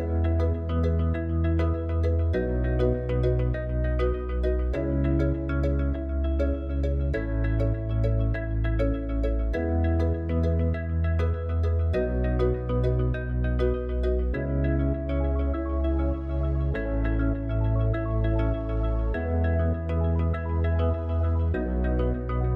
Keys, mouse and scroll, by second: 5.4 Tab, 9.0 click, 13.4 alt+click, 16.1 alt+shift+click.